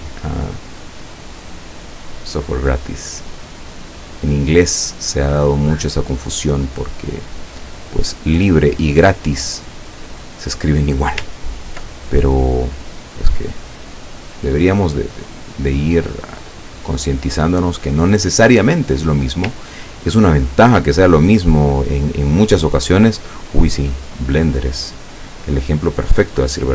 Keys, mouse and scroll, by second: 3.7 click, 7.0 click, 8.5 click, 10.1 click, 11.4-11.8 ctrl+scroll up 2, 12.4-14.2 drag, 15.2-17.8 drag, 19.7-20.2 ctrl+scroll down 2, 20.5 ctrl+scroll down 2, 23.5 click, 23.8 click, 24.6 click.